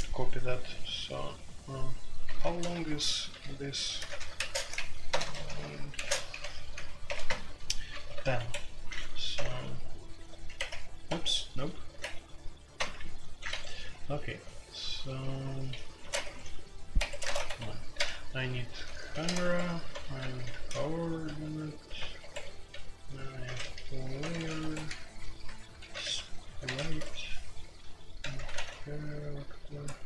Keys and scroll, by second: 2.4 alt+2, 2.7-7.0 typing, 7.2 Return, 8.1 alt+1, 8.3 Escape, 9.1-10.5 typing, 11.0 Escape, 11.6-15.1 typing, 13.5 Escape, 16.0 ctrl+a, 16.2 Escape, 16.3-28.5 typing, 16.9 Escape, 19.4 Escape, 21.9 Return, 29.8-30.0 typing.